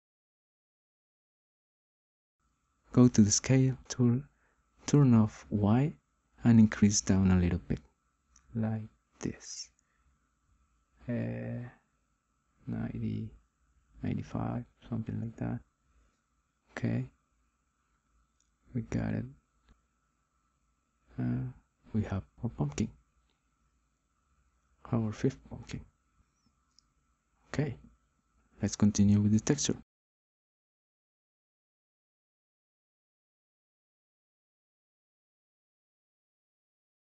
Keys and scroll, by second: 19.4 ctrl+z.